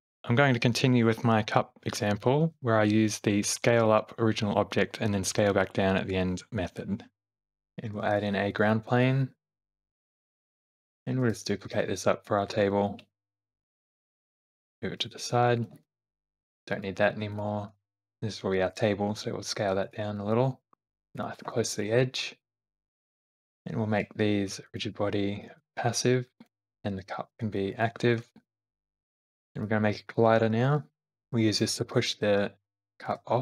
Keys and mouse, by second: 7.7 click, 8.0 shift+a, 9.7 s, 11.2 shift+d, 12.8 shift+middle click, 14.4 middle click, 14.7 g, 16.0 shift+middle click, 16.4 click, 16.6 x, 18.4 s, 20.7 g, 20.7 r, 21.6 shift+middle click, 23.0 click, 23.3 shift+click, 23.9 q, 26.8 q, 28.8 shift+d, 30.7 r, 31.3 middle click, 33.1 g.